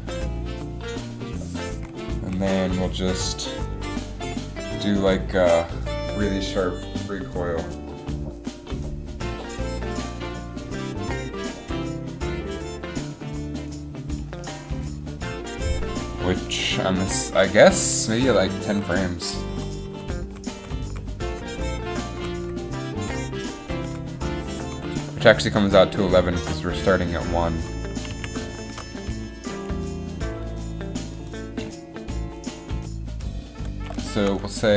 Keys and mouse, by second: 16.9 g, 19.7 Right, 20.0 Right, 20.4 Right, 20.7 Right, 21.0 Right, 21.4 Right, 21.6 Right, 22.0 Right, 22.3 Right, 22.5 Right, 23.2 Left, 24.0 Right, 28.3 a.